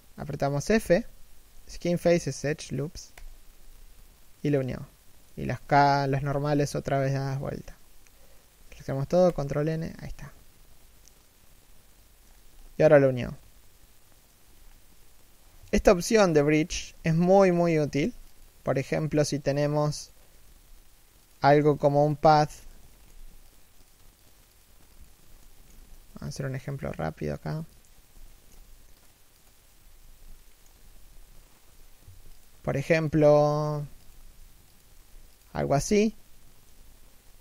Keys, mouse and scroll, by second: 0.5 f, 3.9 middle click, 5.9 a, 6.8 ctrl+n, 10.0 middle click, 12.0-12.3 scroll down 1, 12.3 middle click, 14.2-15.6 scroll down 1, 15.6 7, 16.4 1, 16.9 a, 17.1 scroll down 1, 17.2 z, 18.1 Tab, 18.4 shift+middle click, 20.1 g, 21.1 a, 21.5 alt+right click, 22.6 alt+shift+middle click, 23.1 ctrl+click, 25.1 shift+middle click, 25.6-26.0 scroll down 1, 26.0 ctrl+click, 27.9 shift+middle click, 28.6 ctrl+click, 29.6 scroll down 1, 29.7 a, 30.1 alt+shift+middle click, 30.5 a, 31.4 l, 31.8 shift+d, 33.3 g, 35.3 a.